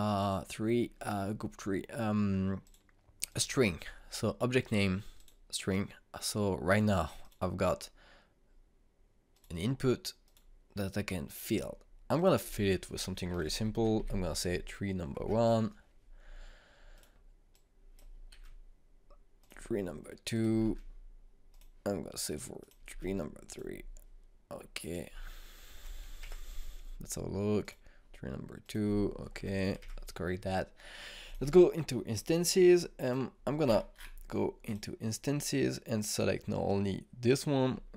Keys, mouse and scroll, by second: 3.2 click, 13.6-15.0 typing, 17.5 click, 18.9 ctrl+c, 20.0 click, 21.2 ctrl+v, 22.1 click, 23.5 ctrl+v, 24.0 click, 26.3 BackSpace, 30.0 BackSpace, 31.8 click, 34.2-34.5 scroll down 1, 35.2 click.